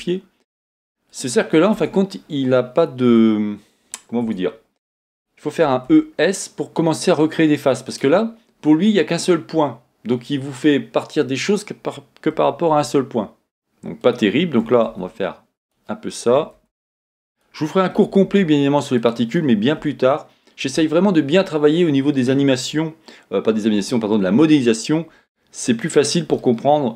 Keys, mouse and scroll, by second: 1.1 click, 1.7 Tab, 5.7 e, 8.0 click, 12.4 e, 14.1 click, 14.7 e, 15.7 click, 16.3 e, 17.4 click, 18.0 e, 19.1 click, 19.8 f, 20.7 Tab, 23.8 KP_1, 25.1 scroll down 1, 26.4 shift+middle click.